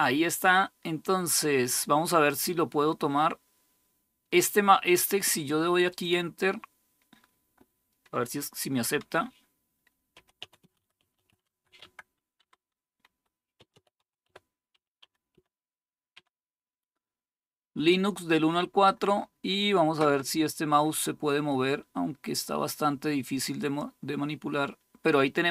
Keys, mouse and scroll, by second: 11.1-14.8 typing, 15.9 typing, 23.3-25.5 drag.